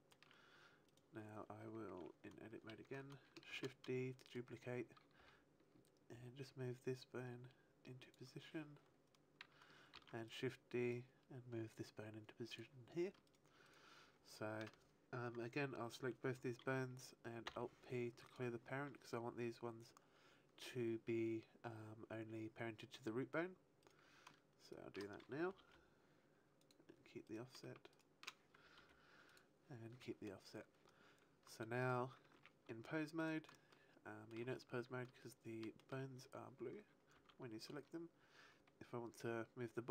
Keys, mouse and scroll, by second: 0.8 right click, 2.4 Tab, 3.4 shift+d, 4.3 right click, 5.1 g, 8.1 click, 9.8 shift+d, 10.2 right click, 10.8 click, 13.2 shift+right click, 13.5 shift+right click, 17.4 alt+p, 23.7 right click, 24.6 shift+right click, 25.5 ctrl+p, 27.2 right click, 27.8 shift+right click, 28.7 ctrl+p, 29.8 a, 31.7 right click, 32.3 ctrl+Tab, 33.1 right click, 33.6 shift+middle click, 34.6-35.1 scroll down 1, 35.1 shift+middle click, 37.1 r.